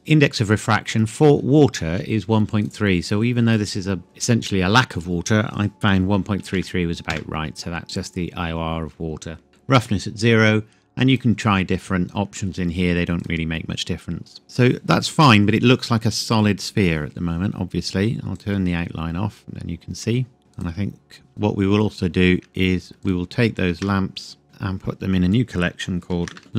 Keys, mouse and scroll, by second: 0.0-1.5 scroll up 1, 2.6 click, 5.7 KP_1, 5.9 KP_Decimal, 6.4 KP_3, 7.2 KP_Enter, 11.1 click, 18.4 click, 20.5 click, 23.0 ctrl+click, 26.2 typing.